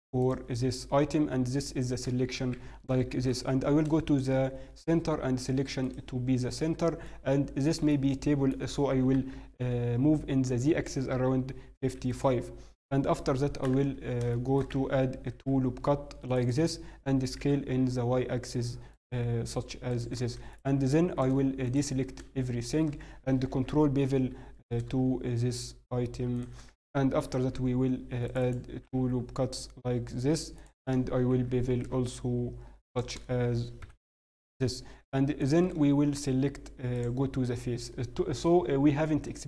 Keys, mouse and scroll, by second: 2.5 t, 3.2 click, 3.2 shift+c, 3.5 shift+s, 6.6-8.5 scroll down 2, 7.0 middle click, 8.9 middle click, 8.9 g, 13.4 scroll up 1, 13.9 Tab, 14.3 shift+middle click, 14.3 scroll up 1, 15.1 ctrl+r, 16.7 s, 19.9 click, 20.1 a, 20.5 alt+right click, 21.2 alt+a, 21.6 alt+click, 22.6 alt+shift+click, 23.5 ctrl+b, 27.2 ctrl+r, 28.7 s, 31.3 ctrl+b, 33.8 ctrl+KP_7, 34.5-35.3 scroll up 1, 35.4 click.